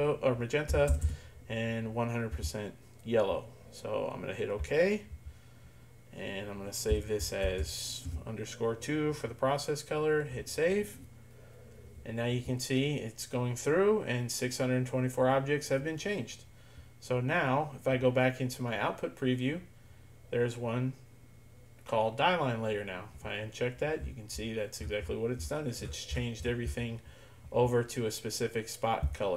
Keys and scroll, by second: 0.5-1.5 typing, 2.3 Tab, 6.9 Tab, 7.5 shift+-, 8.1 2, 10.1 typing.